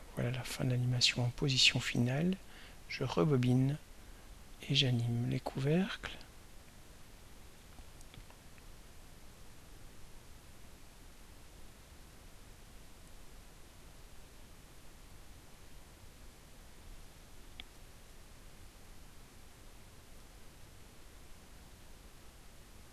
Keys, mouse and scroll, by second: 0.1 click, 3.7 click, 5.4 click, 11.9 click, 14.3 click, 15.6 click, 16.3 click, 19.3 click.